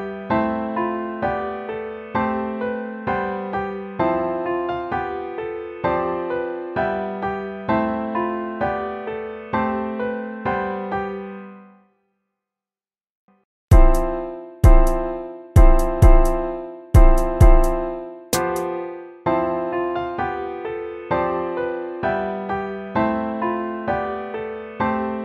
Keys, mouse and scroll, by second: 9.5 BackSpace, 9.7 BackSpace, 11.3 BackSpace, 13.1 ctrl+-, 13.6 ctrl++, 13.8-15.3 typing, 14.4 ctrl+-, 17.6 BackSpace, 17.9 BackSpace, 18.6 BackSpace, 18.8 BackSpace, 19.1 ctrl+-, 20.2-23.2 typing, 24.2 ctrl++, 24.4 BackSpace, 24.8 BackSpace, 25.0 BackSpace.